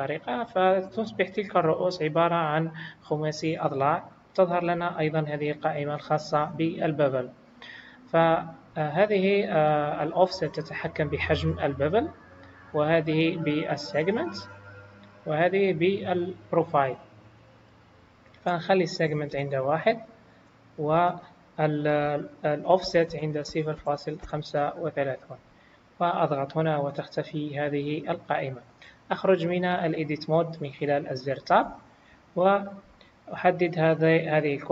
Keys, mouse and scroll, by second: 8.4 click, 15.9 click, 20.8 click, 26.2 click, 31.5 Tab, 33.0 click.